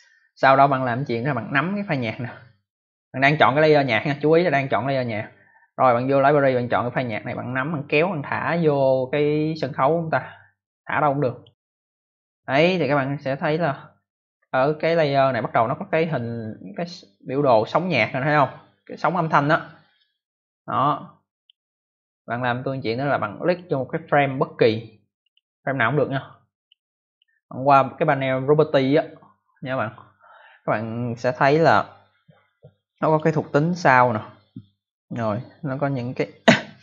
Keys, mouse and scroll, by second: 1.4 click, 7.2 click, 16.0 click, 19.9 click, 23.3 click, 23.8 click, 24.4 click, 26.2 click, 27.0 click, 27.1 click, 31.6 click, 36.1 click.